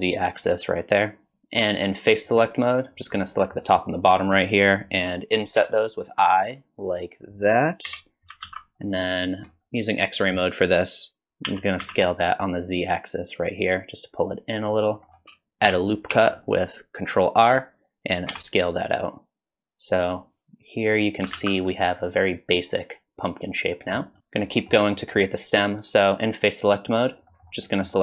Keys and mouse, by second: 2.3 click, 3.2 middle click, 5.6 i, 7.9 KP_1, 8.4 alt+z, 9.2 shift+click, 11.5 s, 16.1 ctrl+r, 18.3 s, 21.4 alt+z, 21.7-23.9 middle drag, 24.2 3, 24.4 middle click, 25.0 middle click, 27.3 middle click, 27.7 middle click.